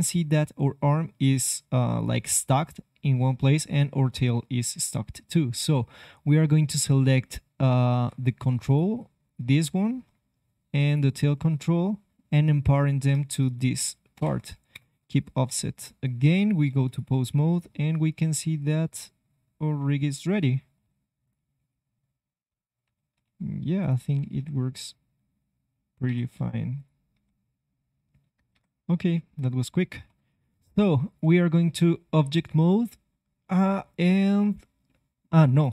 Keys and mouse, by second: 6.8 ctrl+Tab, 8.6-10.8 right drag, 11.3 click, 11.7-14.1 middle drag, 14.1 ctrl+p, 15.4 KP_3, 15.8 ctrl+Tab, 16.8 click, 17.3 click, 17.8 g, 21.2-23.2 drag, 21.5 g, 23.7-25.9 drag, 24.1 r, 26.7-28.8 drag, 27.1 r, 29.1-30.6 drag, 30.0 ctrl+Tab, 35.6 click.